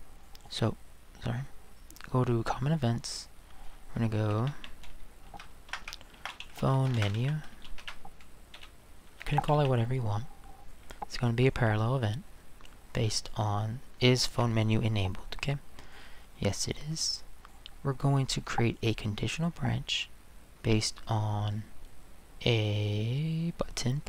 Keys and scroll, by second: 4.2-4.5 typing, 5.7-9.7 typing.